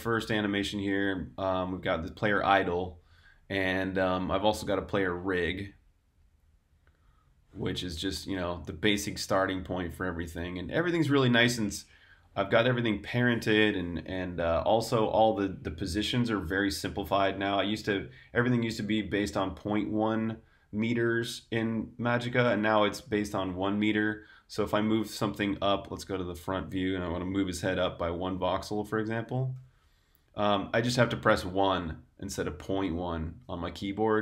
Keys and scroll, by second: 25.9 super+1, 27.7 g, 28.1 z, 29.1 1, 29.4 Return.